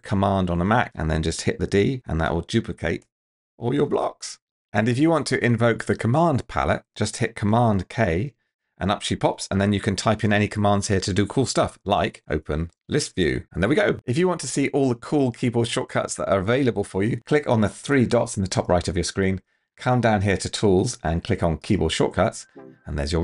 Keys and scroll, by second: 2.2 shift+super+d, 8.1 super+k, 11.7-13.3 typing.